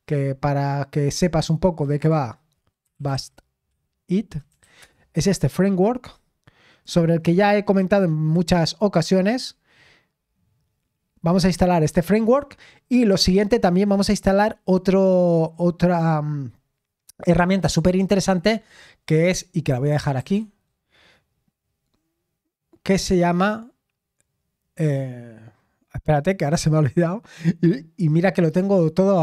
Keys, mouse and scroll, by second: 1.0-4.5 drag, 4.5 Down, 4.5 typing, 4.8 Return, 6.7-7.2 typing, 6.8-8.9 drag, 8.9-12.8 scroll down 1, 8.9 typing, 12.8 scroll down 1, 19.7 click, 20.1 ctrl+t.